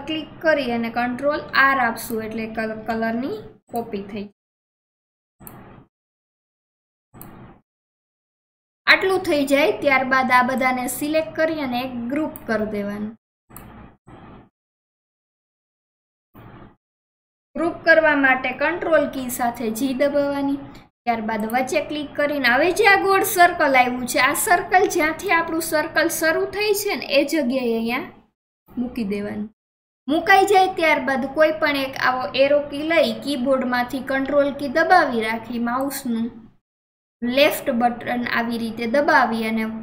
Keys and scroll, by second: 0.6 ctrl+r, 2.5 ctrl+r, 2.9 ctrl+r, 3.9 ctrl+r, 4.4 ctrl+r, 5.8 ctrl+r, 6.2 ctrl+r, 7.7 ctrl+r, 18.3 ctrl+r, 19.0 ctrl+g, 34.2 ctrl+g.